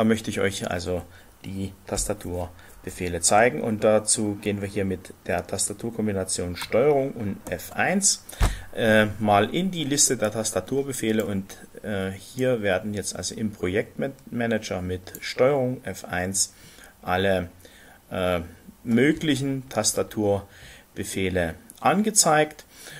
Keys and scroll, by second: 7.5 ctrl+F1, 7.5 ctrl+1.